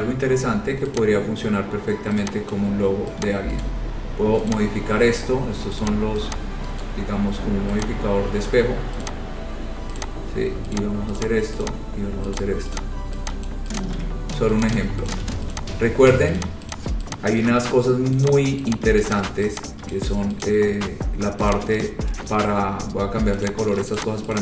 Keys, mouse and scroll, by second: 0.1-0.7 scroll, 1.1 click, 2.7 shift+click, 3.8 click, 3.8 right click, 4.7 click, 6.0 click, 7.0 shift+click, 7.0 shift+right click, 8.0 click, 9.2 click, 10.2 click, 10.9 click, 11.1 shift+click, 11.3 click, 11.7 shift+click, 11.8 click, 12.5 click, 12.9 click, 13.6-14.0 shift+click, 13.9 click, 14.1 c, 14.8 click, 15.2 shift+click, 15.4 c, 15.7 click, 16.0 scroll, 16.5 click, 16.9 click, 17.5 click, 18.5 click, 18.9 click, 19.3 shift+click, 20.1 shift+click, 20.6 click, 20.9-21.6 scroll, 21.7 click, 23.7 click, 24.1 click.